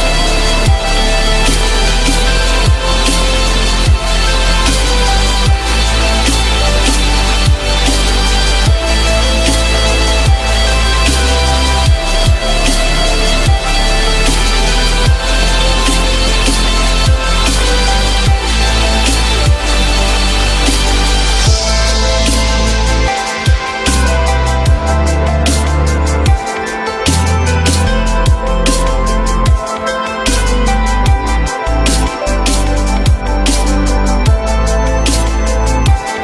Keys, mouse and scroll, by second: 2.1 z, 8.2 alt+a, 11.0 ctrl+v, 13.4 alt+a, 29.9 alt+middle click, 31.3 alt+a.